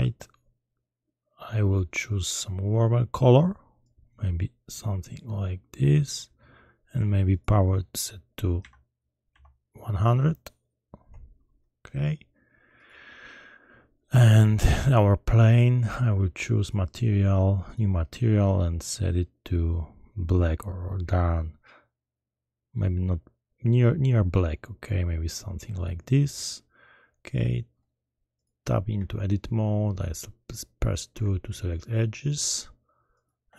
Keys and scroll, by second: 9.3 0, 11.0 Return, 31.1 2.